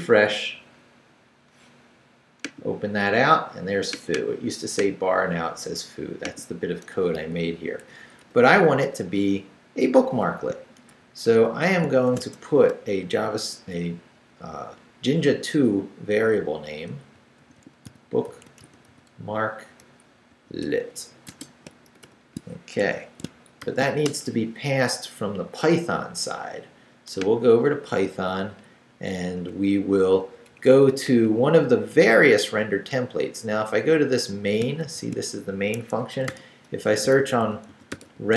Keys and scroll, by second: 7.3 a, 8.0 BackSpace, 10.9 shift+[, 12.2 shift+_, 16.8-21.9 typing, 22.8 shift+Escape, 23.6 shift+;, 23.9 shift+w, 24.1 Return, 28.6 Down, 29.4 Up, 30.5 Up, 31.1 Down, 31.7 Up, 34.0 Up, 34.6 shift+Up, 34.8 shift+v, 35.7 shift+Escape, 36.3-38.3 typing.